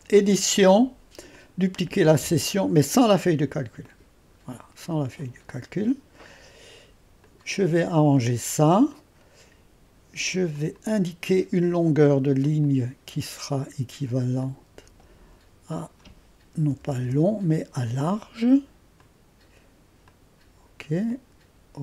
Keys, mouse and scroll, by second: 0.0 click, 1.3-7.8 drag, 7.8-8.8 scroll down 2, 10.5-11.9 drag, 12.4 click, 14.4-15.5 drag, 15.7-16.8 drag, 16.6 BackSpace, 16.8 BackSpace, 17.0 BackSpace, 19.0-21.6 drag.